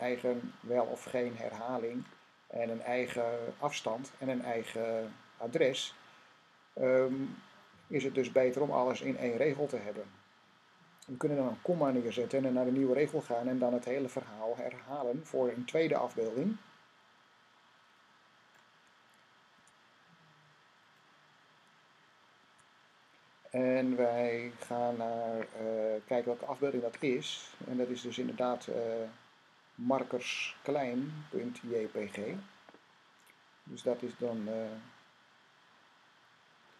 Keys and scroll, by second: 11.6 ,, 19.4 typing, 22.3 typing.